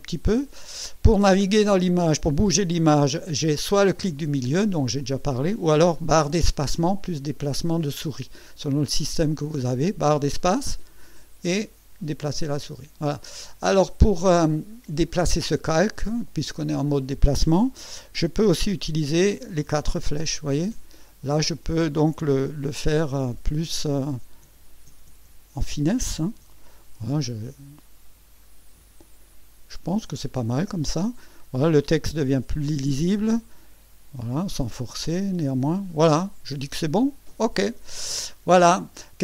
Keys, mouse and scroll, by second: 3.8-5.7 drag, 6.3 space, 9.6 space, 13.8 scroll down 2, 19.3 Right, 20.5 Down, 22.7 Up, 24.4 Down, 24.9 Left, 26.4 Right, 27.2-28.0 ctrl+scroll down 4, 28.4 ctrl+scroll up 2, 28.8-29.3 ctrl+scroll down 4, 32.5 Down.